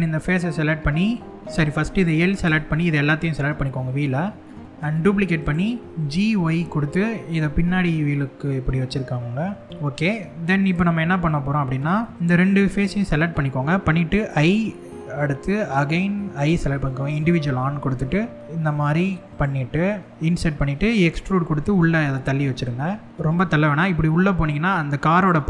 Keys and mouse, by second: 0.8 middle click, 3.0-4.0 middle drag, 4.4 shift+d, 5.0 right click, 5.8 g, 5.9 y, 9.6 click, 9.7 middle click, 11.6 middle click, 16.2 i, 19.4 middle click, 20.4 e.